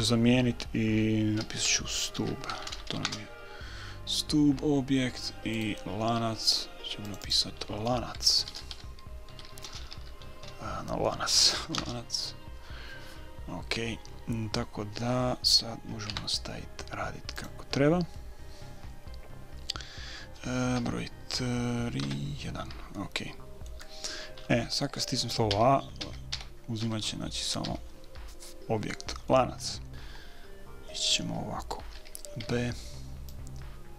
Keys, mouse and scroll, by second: 5.9-7.6 right drag, 7.4-9.5 drag, 16.4 Tab, 19.3 middle click, 20.6 middle click, 21.2 KP_3, 21.5 middle click, 22.4 KP_1, 23.4 middle click, 25.3-26.7 middle drag, 25.9-28.0 typing, 33.0 b.